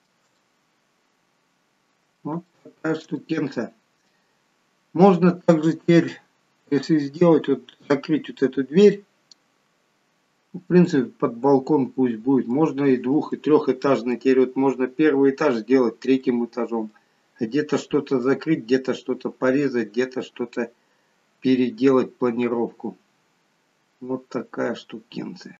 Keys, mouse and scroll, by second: 0.3 middle click, 2.4 shift+middle click, 3.1 middle click, 4.3-5.4 scroll down 1, 6.5 scroll up 1, 7.3-8.1 scroll up 2, 9.4 scroll down 2, 10.8 middle click, 13.3 middle click, 18.2 middle click, 20.5 middle click, 24.9-25.5 scroll up 1.